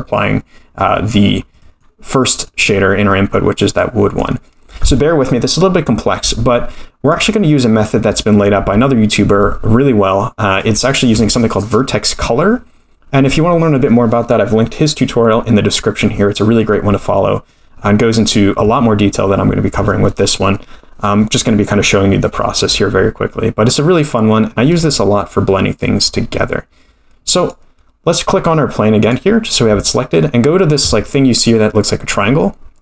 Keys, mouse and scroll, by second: 1.3-1.6 scroll down 3, 1.6-3.1 middle drag, 3.1-3.8 scroll down 2, 3.8-4.4 middle drag, 7.1 click, 8.6 x, 16.6-17.2 scroll down 5, 17.2 middle click, 17.9-19.9 scroll down 2, 27.3 click, 29.0-32.1 drag.